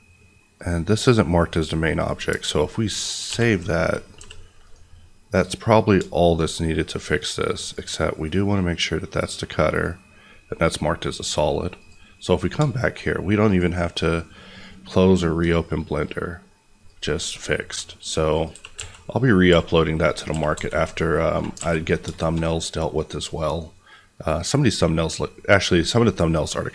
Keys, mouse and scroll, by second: 1.6 middle click, 3.2 ctrl+s, 4.1 g, 4.6 right click, 4.9 middle click, 7.5 click, 11.7 click, 12.2 middle click, 12.9-13.4 scroll up 1, 13.4 click, 15.7-16.7 scroll down 1, 16.7 click, 17.1 s, 18.3 click, 18.5-20.5 typing, 20.0 click, 21.2 click, 21.5 alt+a, 21.9 scroll, 22.1 shift+middle click, 23.2 click.